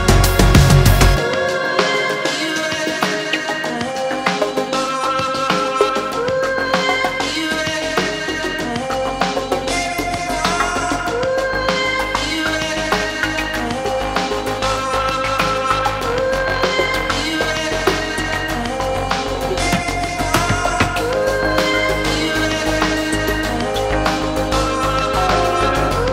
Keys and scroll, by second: 18.1 Return.